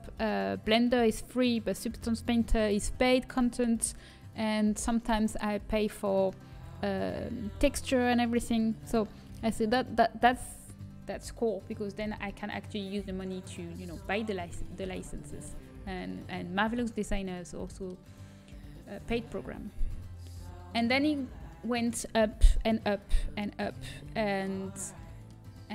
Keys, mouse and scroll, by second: 13.3-18.3 middle drag, 23.8 middle click.